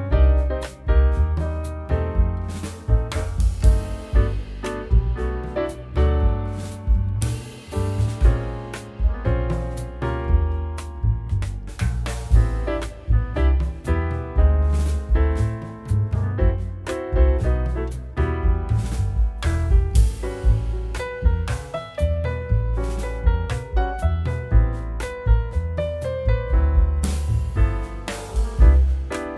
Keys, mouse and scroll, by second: 13.8-14.9 scroll down 1, 19.4 double click, 20.2 middle click, 21.7 scroll, 21.8 scroll down 1, 22.3 middle click, 22.6 t, 22.9 z, 23.1-23.4 scroll down 1, 23.4-23.9 scroll up 1, 28.9 Escape.